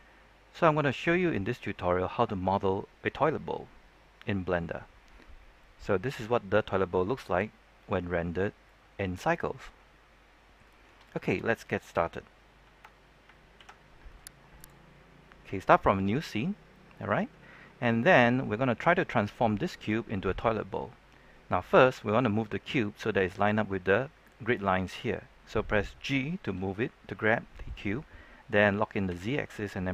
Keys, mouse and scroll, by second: 1.9-4.9 middle drag, 5.8 ctrl+n, 6.3 click, 14.0 middle click, 14.5-14.8 scroll up 1, 16.1-19.4 scroll down 1, 19.4 g, 22.4 z, 23.6 1, 24.0 click, 24.4-27.1 middle drag, 29.0-29.9 drag.